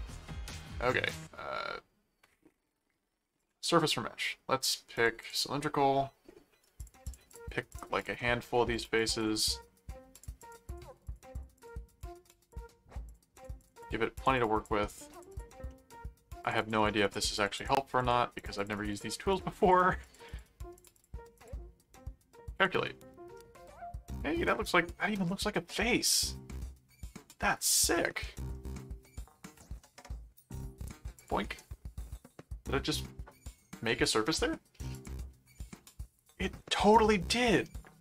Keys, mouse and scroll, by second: 3.4 click, 5.0 click, 6.8-8.5 drag, 8.2 middle click, 8.7 click, 9.4 middle click, 10.1-12.4 drag, 12.5-15.8 drag, 15.7 middle click, 16.4-21.9 drag, 22.5 click, 23.3-25.4 middle drag, 25.9-27.1 middle drag, 27.9 middle click, 31.1 click, 34.0 click, 34.9 click, 35.5 middle click, 37.3 middle click.